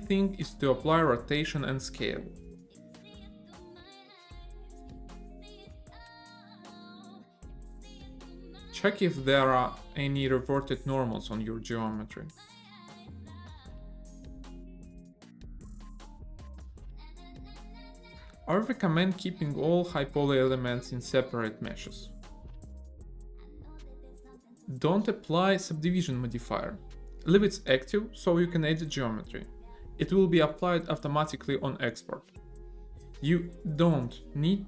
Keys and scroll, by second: 1.7 ctrl+a, 4.6 a, 5.9 ctrl+a, 15.1 a, 16.6 ctrl+n, 17.5 Tab, 18.0 a, 18.2 Down, 27.9 Tab, 31.6 a.